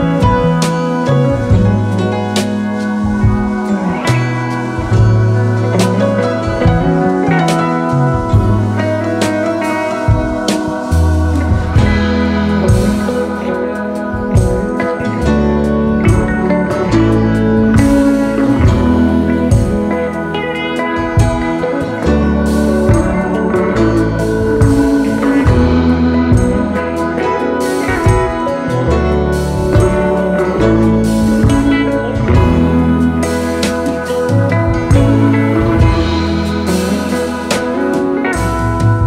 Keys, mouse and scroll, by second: 2.2 double click, 3.2 double click, 3.5 double click, 3.9 double click, 5.2 double click, 7.3 double click, 8.3 space, 8.4 double click, 8.5 space, 9.8 BackSpace, 11.4 double click, 11.6 double click, 13.5 space, 13.8 space, 14.7 double click, 14.8 double click, 17.4 space, 17.5 double click, 17.6 space, 18.1 ctrl+-, 25.9 BackSpace, 26.8 ctrl+-, 26.8 ctrl+-, 27.7 double click, 28.1 double click, 29.4 double click, 29.4 BackSpace, 30.2 ctrl+d, 34.3 double click, 36.8-37.9 alt+scroll up 12, 37.9-38.3 space, 38.5 space, 38.5-39.0 alt+scroll up 5.